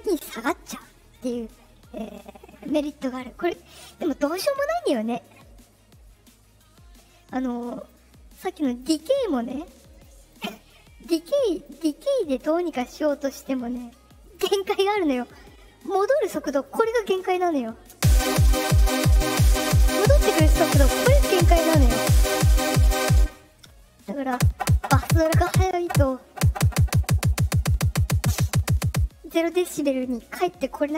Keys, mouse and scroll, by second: 7.7 click, 8.6 click, 9.9 click, 11.5 click, 12.2 click, 12.9 click, 14.2 click, 16.2-16.6 drag, 17.9 space, 23.1 space.